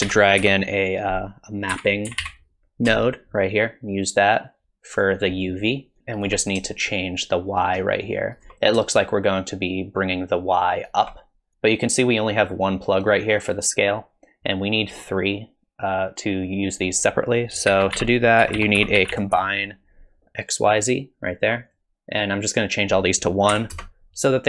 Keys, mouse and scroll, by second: 2.2 p, 6.0 shift+click, 6.9 shift+click, 9.0 shift+click, 17.3 click, 17.7 shift+a, 20.9-22.2 typing, 22.4 click.